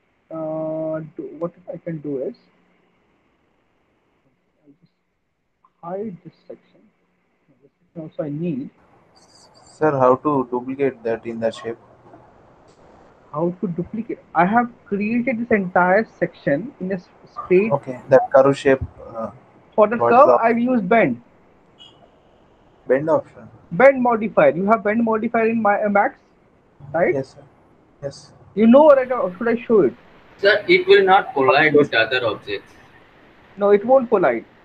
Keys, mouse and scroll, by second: 0.0 alt+middle click, 0.1 middle click, 0.6 middle click, 1.8 alt+middle click, 6.8 click, 7.7 click, 9.2 alt+middle click, 10.0 middle click, 15.0 alt+middle click, 22.6 middle click, 23.5 alt+middle click, 33.6 alt+middle click.